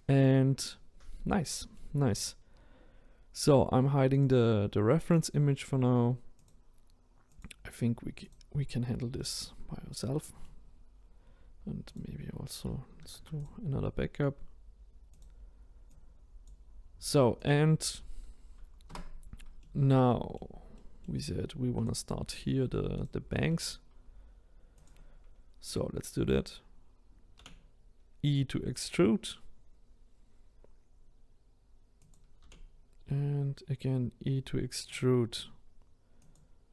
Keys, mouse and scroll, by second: 1.0-1.4 scroll up 1, 1.4-6.4 middle drag, 6.4 click, 9.2-9.7 middle drag, 9.7-10.3 scroll down 1, 10.3-12.0 middle drag, 12.0 click, 13.0 shift+d, 16.5 click, 18.9 Tab, 19.6-21.8 middle drag, 21.8 click, 23.0 shift+click, 23.5-24.8 middle drag, 24.8 click, 27.4 e, 32.4 e, 36.2 click.